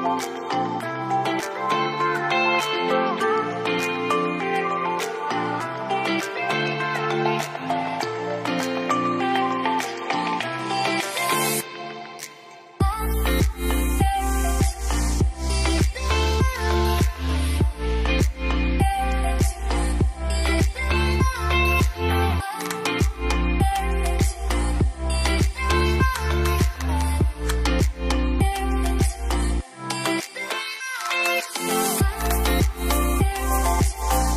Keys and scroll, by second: 1.2 ctrl+a, 17.2-18.2 typing, 20.4 shift+F3, 21.3-22.1 typing.